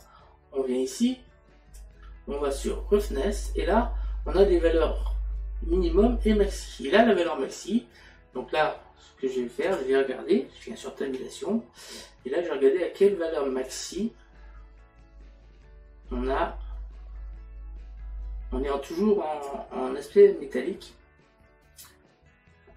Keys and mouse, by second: 0.0 click, 2.6 click, 9.7 click, 13.7 click.